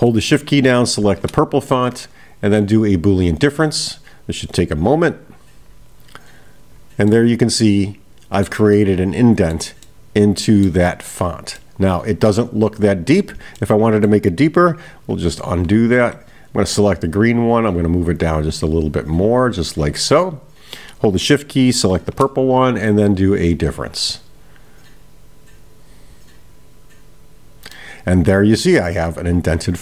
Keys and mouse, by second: 3.0-6.5 drag, 7.1-8.5 middle drag, 8.8-9.7 middle drag, 9.9-10.7 middle drag, 11.6-12.4 middle drag, 13.6-14.2 middle drag, 16.5 click, 18.2-19.8 drag, 21.9 shift+click, 23.2-27.2 drag, 27.8-29.8 middle drag.